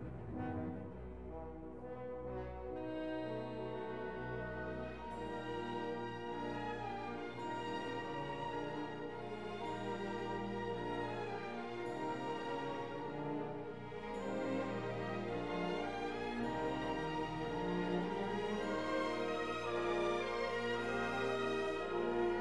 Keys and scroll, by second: 3.8 alt+q, 11.6 ctrl+z, 11.8 alt+q.